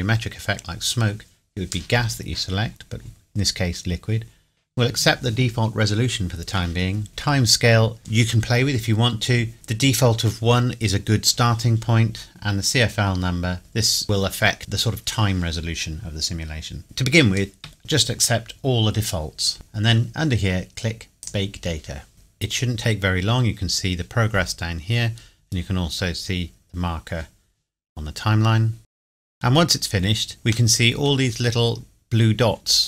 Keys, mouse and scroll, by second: 21.2 click, 30.7 middle click, 31.2 scroll up 1.